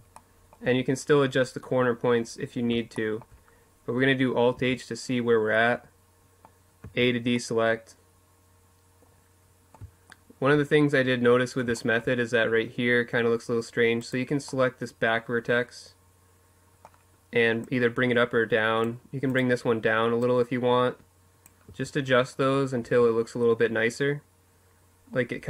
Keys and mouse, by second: 1.7-3.6 middle drag, 3.3 alt+h, 4.3 middle click, 5.5 a, 7.0 click, 7.9 middle click, 12.3 middle click, 12.7-14.2 right drag, 16.4-18.0 drag, 18.9 click, 18.9 right click, 20.4 a, 20.7 middle click, 21.5 Tab.